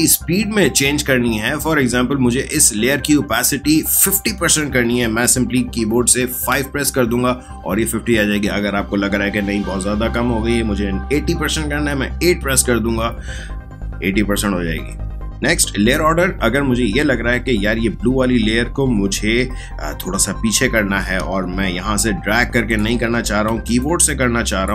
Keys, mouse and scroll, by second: 6.5 5, 12.1 8, 22.0 click, 23.8-24.7 drag.